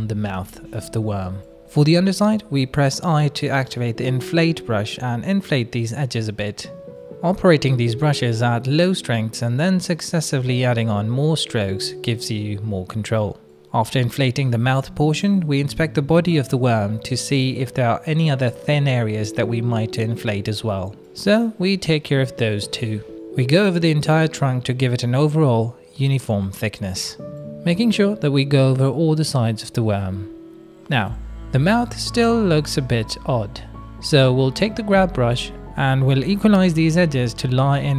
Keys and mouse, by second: 0.0 n, 0.3 shift+click, 0.6 click, 1.1 click, 1.4 click, 2.1 click, 3.2 middle click, 3.5 shift+middle click, 3.8 middle click, 4.1 right click, 4.7 right click, 5.1 click, 5.4 right click, 5.9 click, 6.3 ctrl+z, 6.5 click, 7.2 right click, 7.7 right click, 8.2 click, 8.5 middle click, 8.9 middle click, 9.3 click, 10.6 ctrl+z, 10.8 click, 11.4 shift+click, 11.7 ctrl+z, 12.4-13.8 drag, 14.4 click, 14.7 shift+click, 15.0 click, 16.0 shift+click, 16.0 shift+middle click, 16.2 middle click, 16.8 middle click, 17.4 middle click, 17.7 shift+middle click, 18.0 middle click, 18.9 middle click, 19.2 right click, 19.7 middle click, 20.8 middle click, 21.0 shift+middle click, 21.3 click, 21.5 shift+middle click, 22.3 click, 22.7 click, 23.0 shift+middle click, 23.2 middle click, 23.8 middle click, 24.0 middle click, 24.5 shift+middle click, 24.6 middle click, 25.1 middle click, 25.6 click, 25.9 middle click, 26.1 click, 27.0 middle click, 28.3 middle click, 28.5 click, 28.8 middle click, 29.7 shift+middle click, 30.0 middle click, 31.0 middle click, 31.8 middle click, 32.7 shift+middle click, 33.2 shift+middle click, 33.7 g, 34.3 click, 35.9 middle click, 36.4 middle click, 37.0 click.